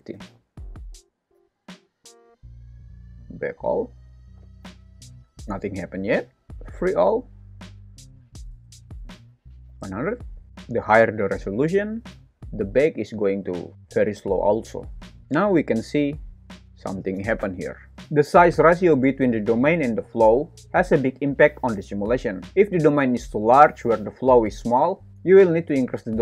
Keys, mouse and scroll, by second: 0.8 click, 3.0-5.9 drag, 4.5 space, 5.5 space, 6.5 click, 8.7 click, 9.8 KP_0, 10.5 click, 15.2 shift+Left, 15.2 space, 19.8 space, 23.1 alt+z, 25.0 `, 25.8 shift+Left, 25.9 space.